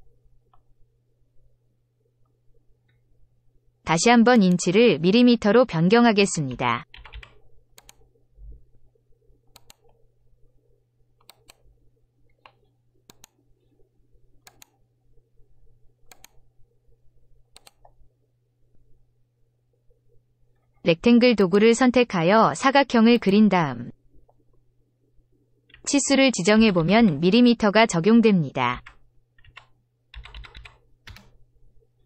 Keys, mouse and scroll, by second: 4.3 click, 5.9-7.5 typing, 7.7 click, 9.5 click, 11.2 click, 13.0 click, 14.4 click, 16.1 click, 17.5 click, 23.1 click, 25.6 2, 26.5 0, 26.7 0, 26.9 0, 28.6-30.5 typing, 31.0 Return.